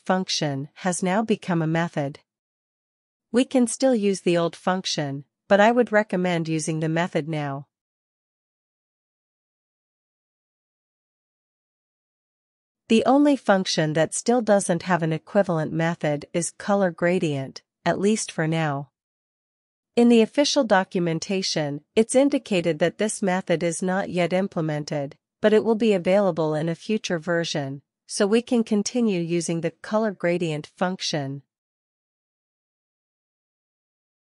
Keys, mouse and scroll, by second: 0.0-1.6 typing, 2.7 ctrl+b, 2.9-4.9 typing, 6.1 alt+shift+f, 6.2-8.2 typing, 8.0 Left, 8.0 Left, 8.1 Left, 8.4 Return, 12.2-13.0 typing, 15.9-18.2 typing, 19.2 Escape, 19.3-20.6 typing, 21.6 super+h, 23.5-24.4 scroll down 2, 27.5-28.5 drag, 30.6-32.6 drag.